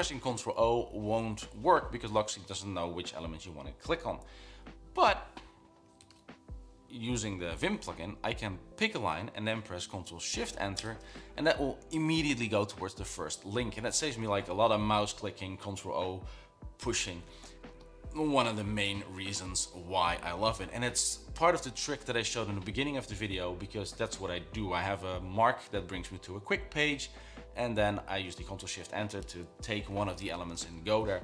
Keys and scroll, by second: 6.0 Escape, 6.3 typing, 8.4 Down.